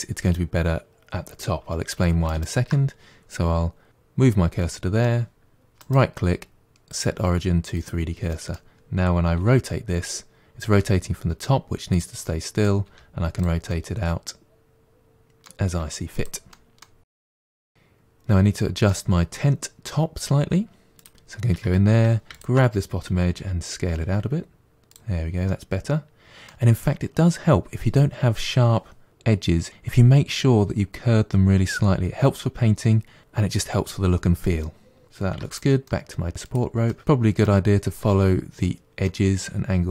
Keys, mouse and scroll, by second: 2.1 shift+right click, 3.9-5.6 middle drag, 5.6-8.2 right drag, 8.2-9.2 middle drag, 9.2 r, 12.1 middle click, 12.7 r, 13.6-15.0 middle drag, 15.0 scroll down 3, 15.2 middle click, 15.4 r, 15.6 middle drag, 15.9 r, 16.1 middle click, 16.3 g, 16.5-17.3 middle drag, 20.8 click, 21.4 Tab, 22.2 alt+click, 23.2 s, 25.3-28.3 middle drag, 34.5 middle click, 35.2 Tab, 35.3 click, 35.7-36.3 middle drag, 36.3 g, 36.7-38.2 middle drag, 38.9-39.9 middle drag.